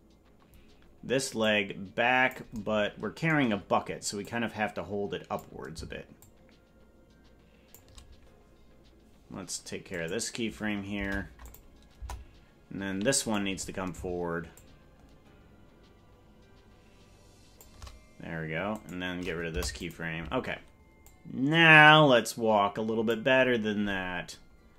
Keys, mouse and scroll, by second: 1.4 click, 4.2-5.4 drag, 6.2-7.8 shift+drag, 9.9 right click, 10.9 Delete, 11.9 KP_0, 13.3 right click, 14.5-17.6 shift+drag, 18.7 right click, 19.5 Delete, 21.0-23.1 drag.